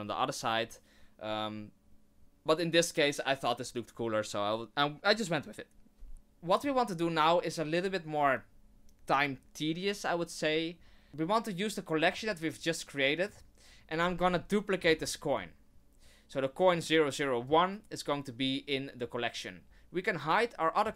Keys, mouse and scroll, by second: 6.1 middle click, 12.0 click, 13.3 click, 14.8 shift+d, 16.7 click, 20.8 click.